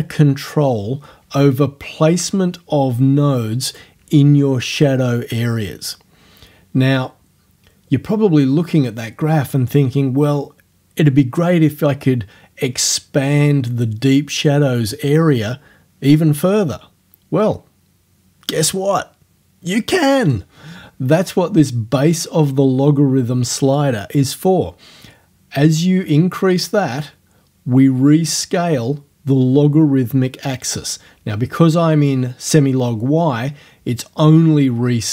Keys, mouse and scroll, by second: 2.6-4.0 drag, 25.8-32.3 drag.